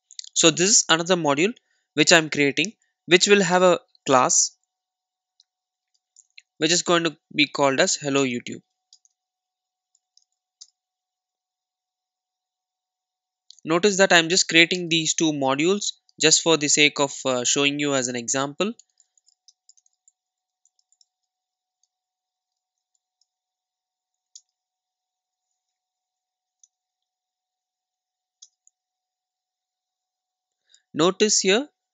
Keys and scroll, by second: 6.0 super+n, 17.0 Return, 24.4 alt+Return.